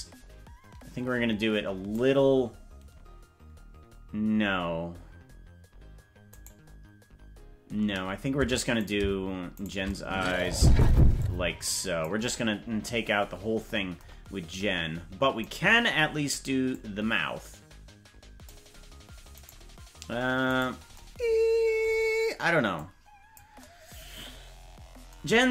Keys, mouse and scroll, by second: 6.4 right click, 8.9 right click, 9.7 shift+right click, 11.1 click, 15.6 right click, 16.6-18.4 drag, 19.6 right click, 20.6 right click, 22.7 click.